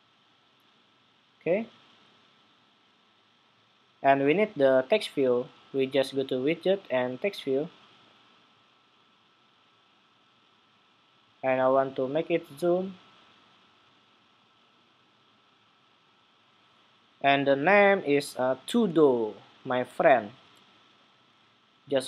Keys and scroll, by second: 19.8 super+c.